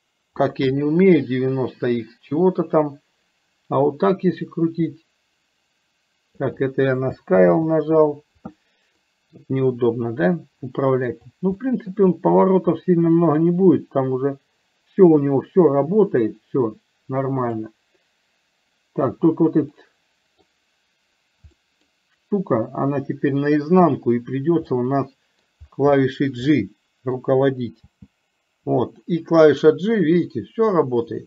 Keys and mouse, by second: 4.6-6.4 drag, 7.4 ctrl+z, 9.1-9.7 middle drag, 10.8-11.1 middle drag, 11.7 shift+middle click, 13.5-17.8 drag, 19.9-20.5 middle drag, 21.7-22.0 middle drag, 24.8-25.5 middle drag, 26.0-26.4 shift+middle drag, 26.5-27.4 middle drag.